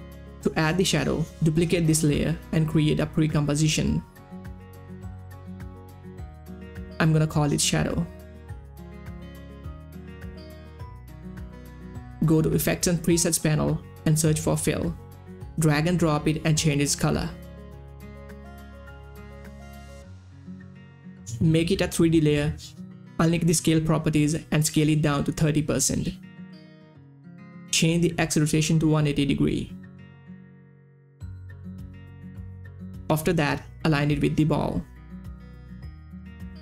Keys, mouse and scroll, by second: 2.6 ctrl+d, 3.3 right click, 4.6 click, 6.8-8.2 typing, 8.8 click, 12.9 click, 13.6-14.7 typing, 15.4-19.1 drag, 19.7 shift+Up, 21.2 click, 22.8 click, 23.5 s, 24.3 click, 25.9 3, 26.4 Return, 27.7 click, 27.9 r, 28.9 click, 31.6 click, 32.0-33.3 typing, 33.0 click, 33.7-35.1 drag, 35.1 click, 36.3 shift+Right.